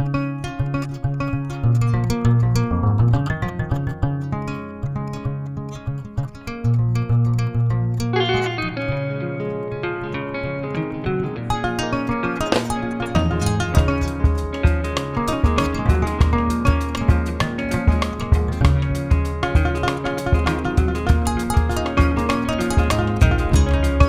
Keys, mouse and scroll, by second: 0.5 Left, 0.8 Left, 1.1 Left, 1.6 Left, 1.9 Left, 2.7 middle click, 3.2 click, 3.7-5.1 middle drag, 5.1-6.1 scroll down 1, 6.1-7.6 drag, 7.6 middle click, 8.2 click, 8.5 middle click, 9.3 click, 9.5 middle click, 9.9-11.0 drag, 11.0 middle click, 11.3-14.8 drag, 14.8 middle click, 15.3-17.7 drag, 17.7-18.8 middle drag, 18.8 click, 19.4 middle click, 20.0-24.0 drag.